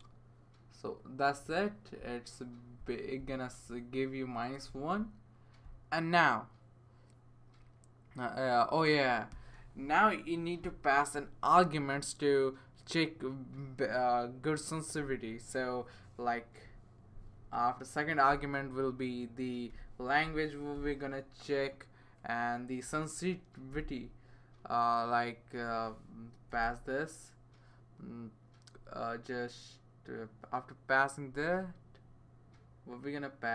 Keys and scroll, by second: 18.3 ,, 19.7-21.2 typing, 23.0 Right, 23.7 ,, 26.5 shift+[.